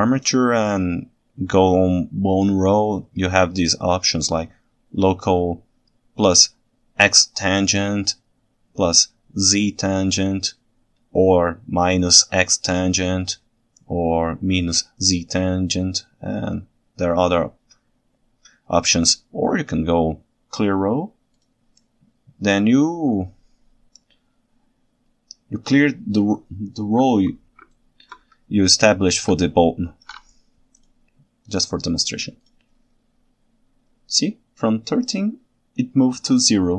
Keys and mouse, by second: 4.8-27.6 drag, 27.7 ctrl+alt+right click, 29.5 ctrl+shift+right click.